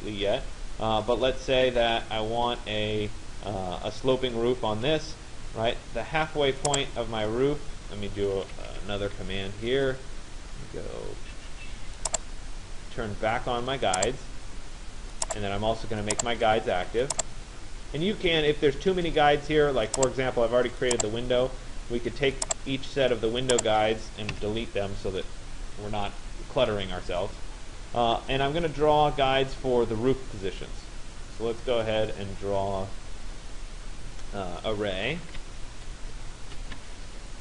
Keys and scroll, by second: 24.0 Delete, 34.8 r, 36.6 Return.